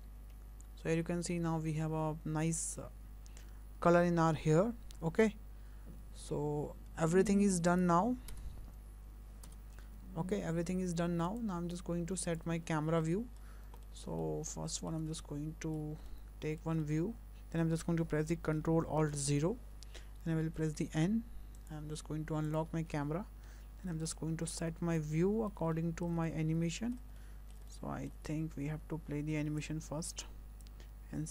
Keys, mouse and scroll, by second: 0.8 scroll down 2, 5.2 click, 7.7 click, 8.3 KP_0, 9.5 KP_0, 10.2-10.7 scroll down 6, 11.5 click, 12.3 click, 12.6 scroll down 2, 13.0 shift+middle click, 13.4-13.9 scroll up 5, 13.9 middle click, 14.2 shift+middle click, 15.2 shift+middle click, 16.1 middle click, 16.8 shift+middle click, 19.1 ctrl+alt+KP_0, 20.4 n, 21.6 click, 22.5 click, 22.7 n, 23.2 scroll down 2, 24.1 ctrl+middle click, 24.7 shift+middle click, 25.8 ctrl+middle click, 26.3 middle click, 27.2 ctrl+middle click, 27.7 ctrl+middle click, 29.6 click, 30.7 click.